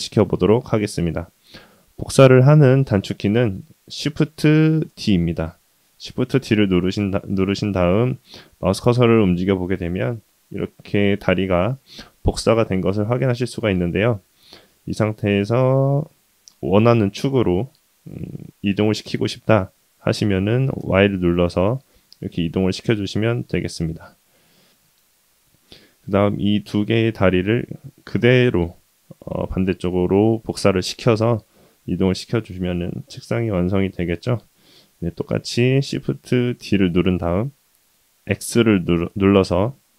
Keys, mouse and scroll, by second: 4.9 shift+d, 24.3 middle click, 24.5 middle click, 25.3 click, 26.4-26.9 middle drag, 28.2-28.8 middle drag, 31.2-34.0 middle drag, 36.5 shift+d.